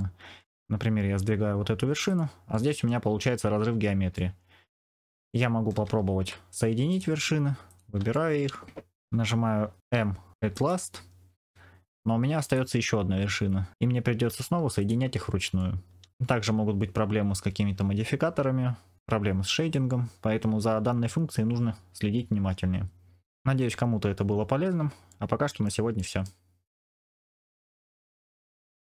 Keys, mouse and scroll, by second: 1.0 g, 2.4 middle click, 4.1 middle click, 5.2 shift+middle click, 6.1 1, 6.8 click, 7.6 click, 8.0 middle click, 9.8 m, 13.7 m, 14.2 m, 15.5 middle click, 25.0 shift+middle click, 25.9 middle click.